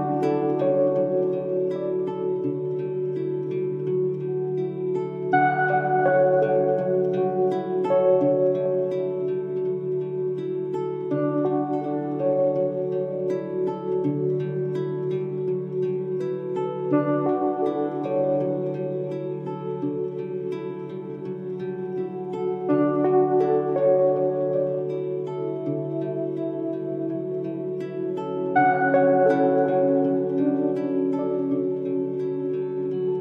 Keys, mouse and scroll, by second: 12.5 click, 14.2 scroll down 1, 15.8 click, 17.4 click, 18.4-19.7 scroll down 1, 21.1-22.1 drag, 27.0 ctrl+z, 27.3-28.2 drag.